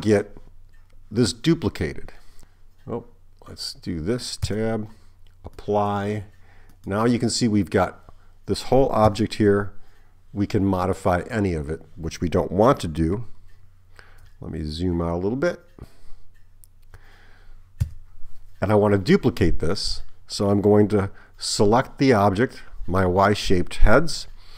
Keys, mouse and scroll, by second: 2.5 Tab, 2.5 a, 4.5 Tab, 5.6 click, 6.7 click, 9.1 Tab, 17.9 Tab.